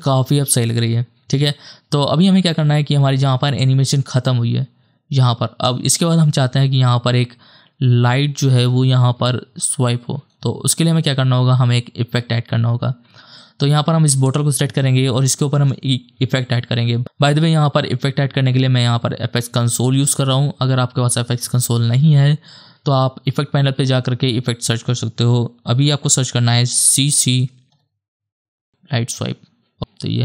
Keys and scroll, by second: 2.5 space, 15.6 ctrl+space, 27.0-28.2 typing.